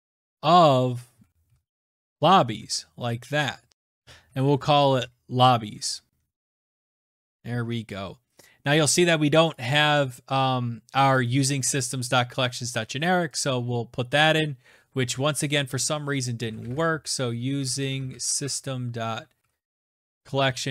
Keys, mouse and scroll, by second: 0.0-5.5 typing, 6.3 Right, 6.7 shift+[, 6.8 Return, 7.3 {, 8.4 right click, 9.0 click, 9.5 click, 11.3 click, 13.4 click, 15.4 click, 15.8 click, 16.2-20.7 typing.